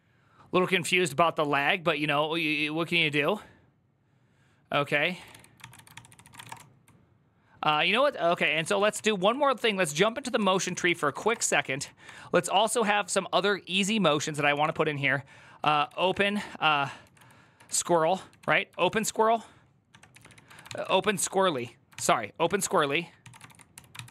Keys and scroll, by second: 4.7-6.9 typing, 8.1-11.5 typing, 9.6 Up, 9.8 Up, 10.0 Up, 11.9 ctrl+d, 13.9-24.1 typing, 20.4 ctrl+c.